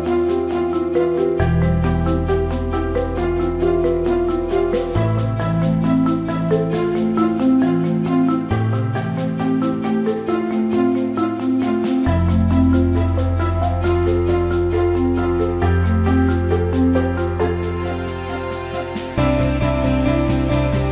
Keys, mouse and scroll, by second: 0.1 h, 0.5 click, 1.4 Tab, 2.9-4.1 shift+drag, 7.5 shift+d, 8.4 alt+middle click, 9.2-10.6 drag, 13.3-18.4 drag, 19.3 Tab.